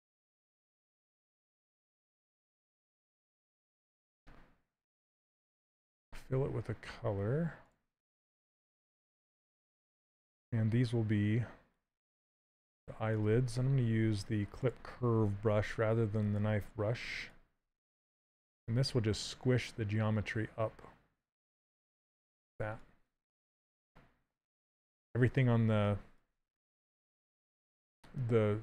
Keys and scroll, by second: 3.3 z, 5.0 c, 5.3 z, 9.7 q, 16.3 s, 19.1 shift+space.